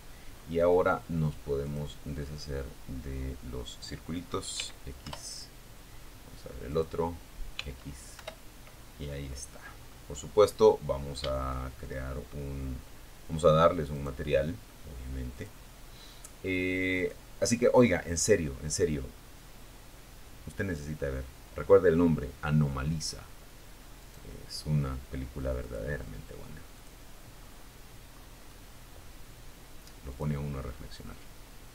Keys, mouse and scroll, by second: 0.8-1.2 scroll down 2, 2.7 x, 3.4 Return, 4.8 click, 5.7 x, 6.4 Return, 7.2-7.7 scroll down 4, 7.8-8.4 scroll up 2, 8.8 scroll down 2, 12.1 click, 12.2 right click, 13.5 click, 15.1 click, 18.8 click, 22.2 right click, 23.8 click, 24.9 click, 25.6-26.0 scroll down 1, 26.3-26.8 scroll up 1, 28.3 click, 30.2 right click, 31.5 click.